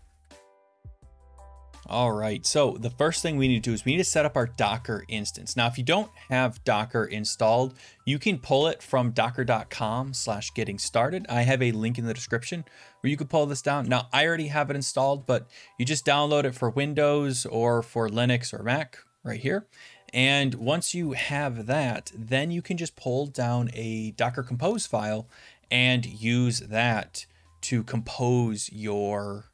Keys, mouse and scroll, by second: 1.1-5.8 drag, 16.3 scroll down 3, 19.8 scroll up 3, 24.9 scroll down 3.